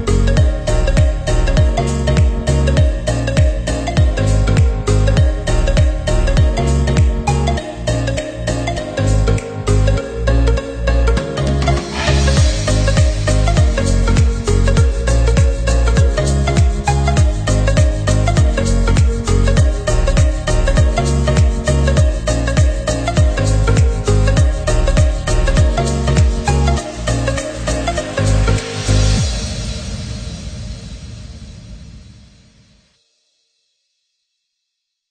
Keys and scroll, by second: 34.2 Left.